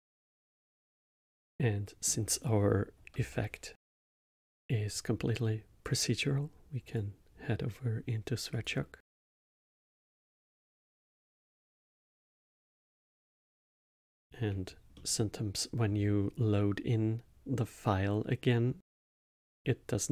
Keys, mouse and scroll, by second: 1.3-3.1 middle drag, 3.1 n, 3.8-5.8 middle drag, 5.8-10.2 drag, 10.2-10.7 scroll up 7, 11.1 scroll up 1, 11.6 scroll up 2, 12.0 middle click, 13.7 middle click, 15.0 middle click, 17.3-18.0 middle drag, 19.2-20.1 drag.